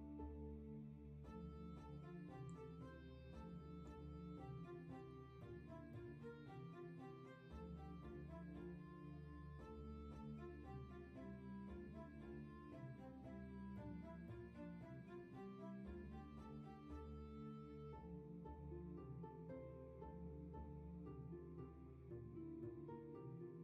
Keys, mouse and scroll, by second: 6.9 ctrl+z.